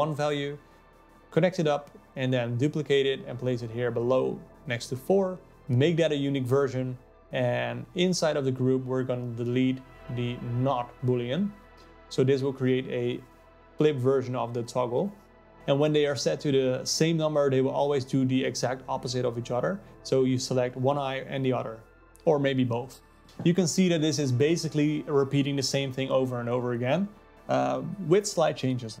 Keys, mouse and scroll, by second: 2.1 click, 2.6 shift+d, 5.5 ctrl+z, 6.5 click, 9.9 alt+click, 10.2 x, 13.4 click, 15.6-29.0 drag.